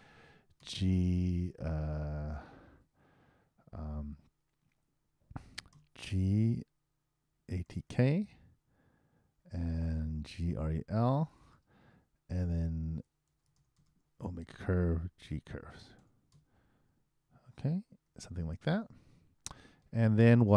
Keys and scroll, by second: 14.2 shift+e, 15.2 shift+g, 16.7 shift+v, 18.0 shift+0.